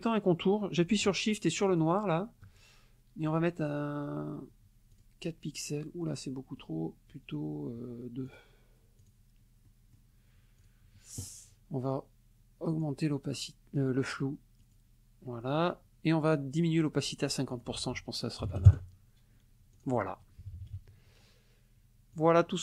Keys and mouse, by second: 1.7 shift+click, 3.2 right click, 4.9 click, 6.6 right click, 8.3 click, 9.0 click, 9.7 click, 10.6 click, 12.7 click, 14.6 click, 17.5 ctrl+click, 17.8 ctrl+a, 18.5 KP_0, 18.7 KP_Enter, 19.7 click, 20.4 KP_Subtract, 22.2 click.